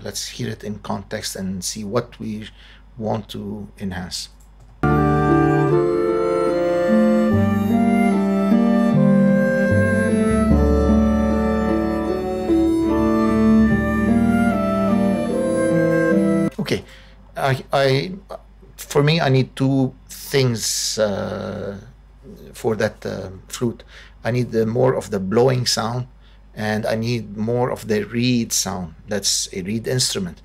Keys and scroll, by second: 4.6 space, 16.2 space.